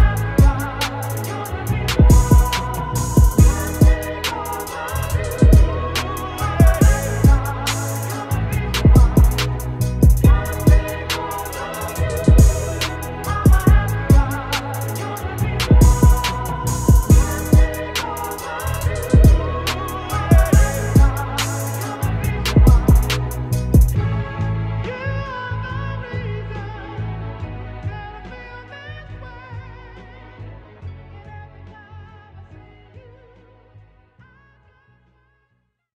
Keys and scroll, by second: 4.0 ctrl+-, 9.1 Left, 9.3 Left, 9.3 Left, 9.6 Down, 9.6 Down, 9.7 Down, 10.8 b, 12.8 x, 15.5 x, 17.2 space, 17.7 s, 18.0 -, 24.9 ctrl+0, 25.3 ctrl+-, 31.9 x, 32.5 ctrl+t.